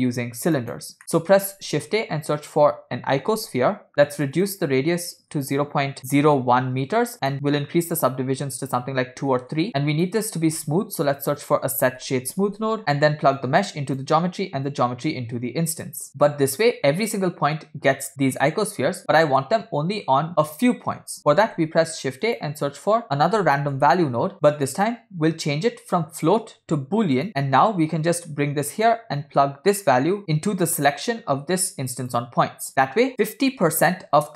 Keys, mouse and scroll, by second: 1.0 middle click, 1.6 shift+a, 3.9 click, 3.9 scroll up 1, 4.4-6.3 drag, 5.5 0, 7.2-9.6 drag, 9.8 click, 10.5 shift+a, 13.4-14.1 drag, 14.8-16.0 drag, 19.0-19.5 middle drag, 19.6 scroll up 2, 21.4 shift+a, 23.0 shift+a, 26.2-27.3 drag, 27.3 middle click, 27.3 scroll down 3, 27.5-29.0 drag, 29.2 middle click, 29.5-30.2 scroll up 3, 30.2 middle click, 30.7-32.3 drag, 33.1 middle click, 33.1 scroll up 5.